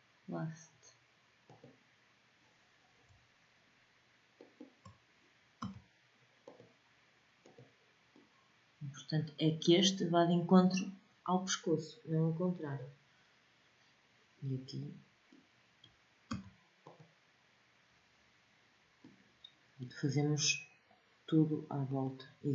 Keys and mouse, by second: 5.2 w, 7.9 middle click, 14.3 middle click, 15.9 w, 18.2 middle click, 21.5-22.5 drag.